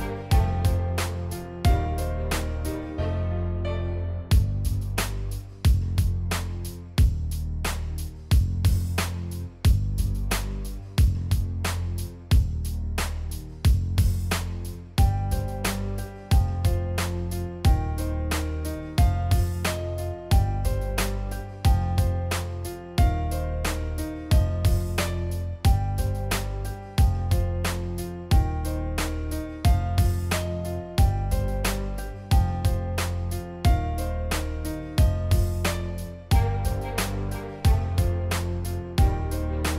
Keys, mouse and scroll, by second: 1.0 click, 2.1 click, 4.2 click, 4.5 click, 4.6 click, 5.3 click, 6.4 click, 6.6 click, 7.2 click, 7.7 click, 8.1 click, 8.5 click, 9.1 click, 9.4 click, 9.6 click, 9.8 click, 9.9 click, 10.4 click, 10.6 ctrl+s, 11.0 click, 11.4 click, 11.7 click, 12.1 click, 12.7 click, 12.9 click, 13.2 click, 13.4 click, 13.5 click, 14.3 click, 14.8 click, 15.2 click, 15.9 click, 16.1 click, 16.2 click, 16.4 click, 17.1 click, 17.2 click, 17.6 click, 18.7 click, 20.0 click, 21.2 click, 22.2 click, 22.3 click, 23.7 click, 25.0-26.5 drag, 26.7 z, 27.0 shift+x, 28.2-32.1 drag, 32.8 click, 33.2 a, 33.6 v, 33.8 click, 34.1 drag, 34.9-36.2 drag, 36.9 click, 38.2-39.7 drag.